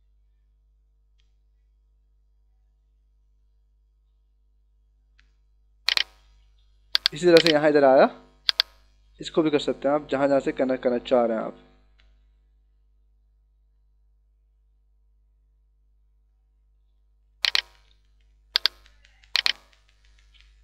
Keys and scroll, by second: 6.8 h.